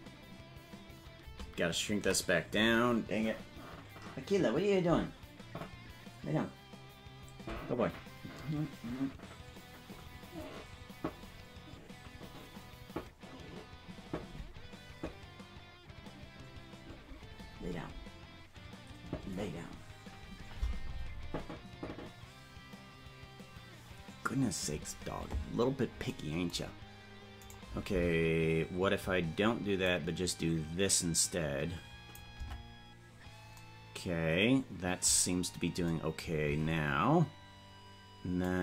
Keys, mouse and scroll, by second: 0.9 ctrl+z, 28.1 right click, 29.8-32.1 drag, 32.9 Tab, 36.5 Tab, 38.4-38.6 drag.